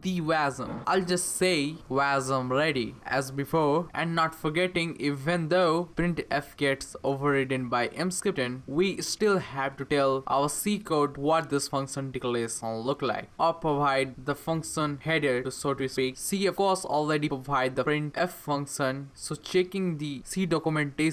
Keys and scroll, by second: 9.1 Return, 9.3 Return, 10.0 Up, 13.8-15.1 typing, 15.7 Return, 18.9 End, 19.6 End, 20.2 BackSpace, 20.3 BackSpace, 20.5 BackSpace, 20.9 BackSpace.